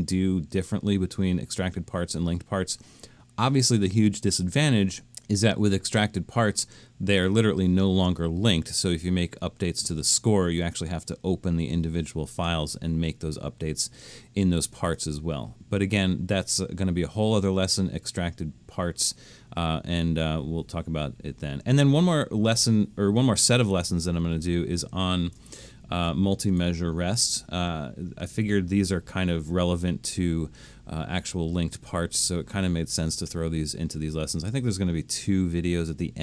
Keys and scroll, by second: 25.6 alt+super+..